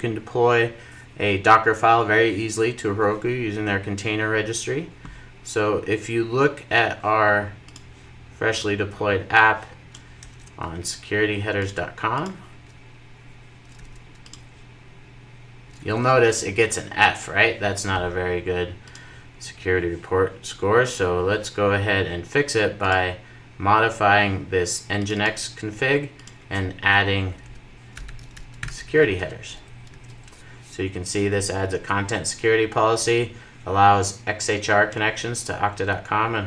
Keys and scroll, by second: 28.7 Return, 29.4 super+s.